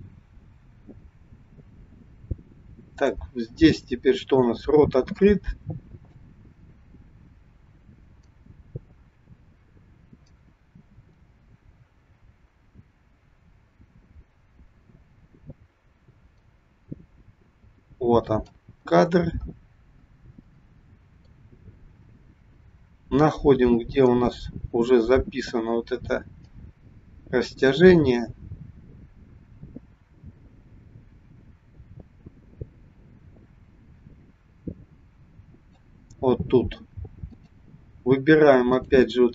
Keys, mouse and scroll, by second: 3.6-3.9 scroll up 3, 4.6 shift+middle click, 6.3 click, 18.9-20.3 scroll up 10, 20.3 middle click, 23.9 click, 26.5 click, 37.3 click, 38.5 click.